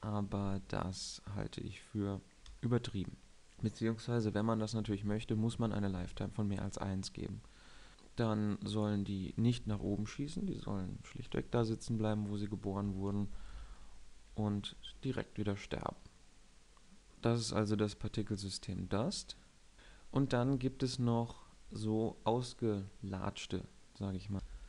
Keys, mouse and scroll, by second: 0.8 alt+a, 2.6 alt+a, 9.8-11.7 drag, 11.7 KP_1, 13.4 shift+Left, 13.7 alt+a, 14.7 alt+a, 16.9 KP_7.